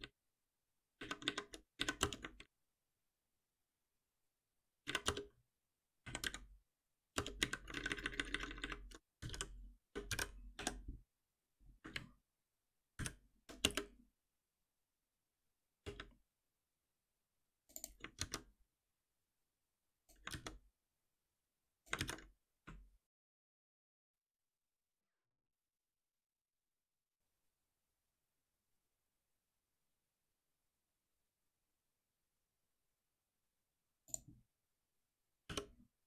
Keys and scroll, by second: 9.9 Return, 10.5 Escape, 12.9 ctrl+alt+v, 18.1 ctrl+c, 20.2 ctrl+v, 23.1 shift+F10, 35.4 alt+F7.